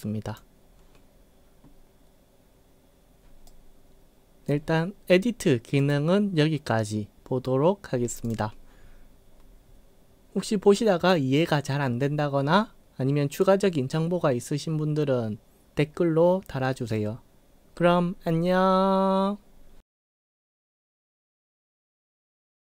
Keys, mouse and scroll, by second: 3.5-4.5 right drag, 5.8 click, 8.3 click.